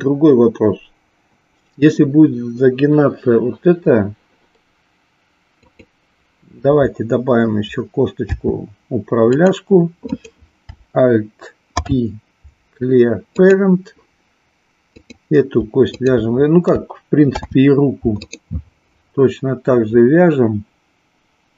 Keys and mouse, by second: 5.5 click, 8.4 e, 10.0 click, 14.9 click, 15.9 shift+click.